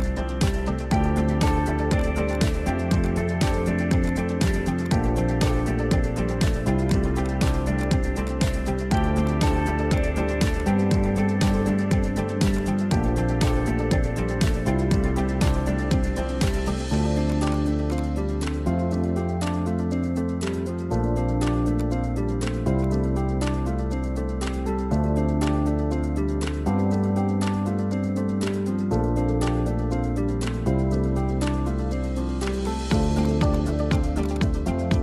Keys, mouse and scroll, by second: 0.7 middle click, 1.0-1.5 scroll down 1, 1.5 alt+h, 1.9 click, 2.3 click, 2.7 h, 2.9 click, 3.4 Tab, 3.9 3, 4.0 click, 4.5 Delete, 5.1-5.9 scroll up 1, 5.9 Tab, 6.8 right click, 7.8 click, 8.2 click, 8.9 drag, 9.2-10.7 drag, 11.4 alt+h, 11.9 scroll down 2, 12.2-12.5 scroll up 1, 12.5 drag, 13.1 g, 15.7-16.4 middle drag, 16.4 drag, 16.9 click, 17.2-17.8 right drag, 17.8 click, 17.9-19.6 drag, 19.9 `, 21.7 shift+right click, 22.1 shift+a, 23.4 s, 25.4 click, 25.9 middle click, 26.1 scroll down 4, 26.3-26.9 middle drag, 26.9 g, 28.3 middle drag, 28.6 scroll down 3, 28.7-29.1 middle drag, 29.1 `, 30.0-30.6 scroll up 16, 30.6-32.6 shift+middle drag, 32.6 shift+right click, 33.2-33.9 right drag, 33.9 click, 34.2-35.0 drag.